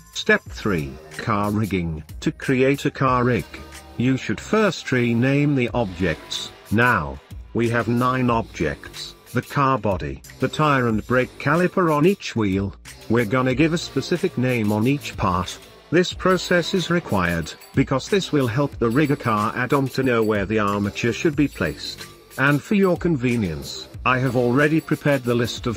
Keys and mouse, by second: 0.1 middle drag, 0.6 shift+middle click, 1.0 middle click, 1.2 n, 1.5-2.1 middle drag, 2.5-2.9 middle drag, 3.9 click, 6.5 click, 6.8-7.7 drag, 8.9-9.7 drag, 9.7 middle click, 10.6-11.5 shift+middle drag, 12.4 click, 16.2-22.2 drag.